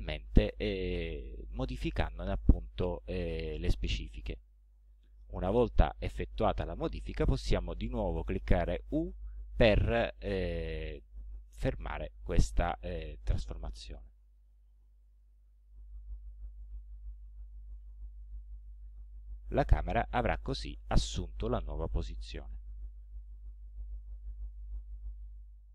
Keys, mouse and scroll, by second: 4.1-5.4 middle drag, 5.4 click, 8.9 u, 14.0 middle click, 14.5-15.2 scroll down 4, 15.4-15.7 scroll up 2, 16.7 c, 17.8 c, 19.0 c, 20.2 c, 23.1 c, 24.2 c.